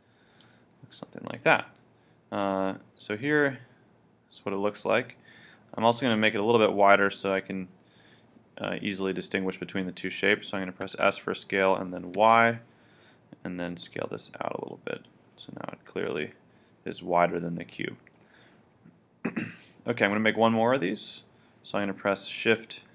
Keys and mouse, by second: 2.5-4.0 middle drag, 10.9 s, 15.0 click, 15.3-17.3 middle drag.